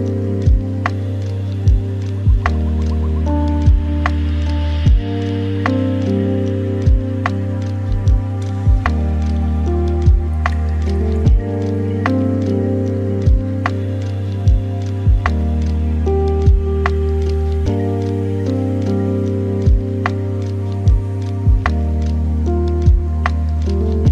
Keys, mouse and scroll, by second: 5.4-7.2 middle drag, 8.1-16.3 drag, 17.3-22.7 drag, 22.7-24.1 right drag.